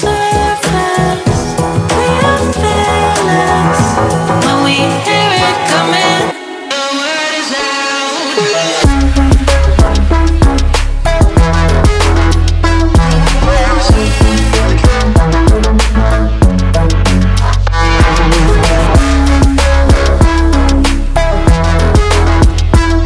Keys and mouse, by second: 0.7-3.5 drag, 4.6 shift+z, 5.5 ctrl+middle click, 6.4 shift+middle click, 8.5 click, 14.3 click, 16.8 shift+middle click, 17.1 ctrl+middle click, 17.4 middle drag, 17.7 shift+middle drag, 19.1 click, 20.5 click, 20.7 middle click, 21.4 y, 22.6 click, 22.9 shift+middle click.